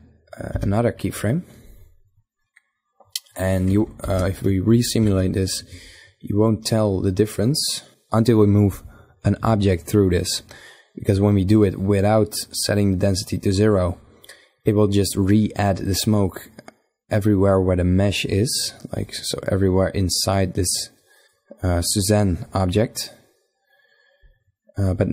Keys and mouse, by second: 0.1 i, 3.5 shift+Left, 3.9 alt+a, 16.7-20.6 middle drag, 22.7-24.5 drag, 24.5-25.1 middle drag.